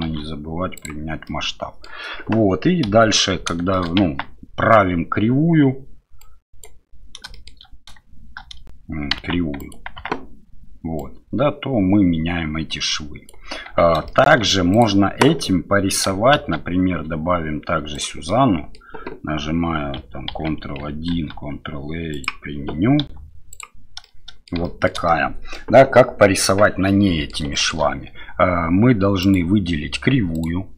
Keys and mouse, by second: 0.0 ctrl+a, 1.2-1.8 middle drag, 2.9 KP_7, 3.7 shift+middle drag, 4.0 Tab, 6.4 right click, 7.3 shift+click, 9.2 Tab, 9.6 click, 10.0 Tab, 11.0-13.3 drag, 13.7 Tab, 14.1 shift+middle drag, 14.8-16.1 drag, 16.3 shift+a, 18.3-18.8 middle drag, 20.3 ctrl+1, 21.1 ctrl+a, 23.0 q, 24.0-24.5 middle drag, 24.6 shift+middle drag, 25.1-25.5 middle drag, 26.9-27.3 middle drag, 27.5 shift+middle click, 29.2 right click, 30.4 right click.